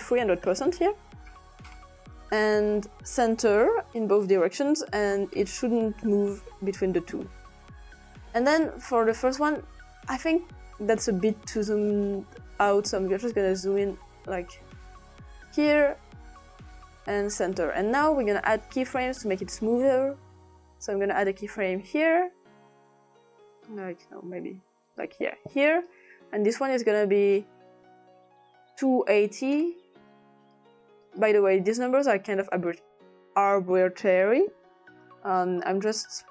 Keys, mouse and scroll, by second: 0.0 click, 0.7-1.8 typing, 2.7 click, 3.6 click, 5.1-7.9 drag, 8.3 click, 11.3-15.5 drag, 16.7 click, 17.3 click, 20.7 click, 23.7 click, 24.9 click, 25.7 click, 26.7 click, 28.5-29.7 typing, 30.4 click, 34.2 click.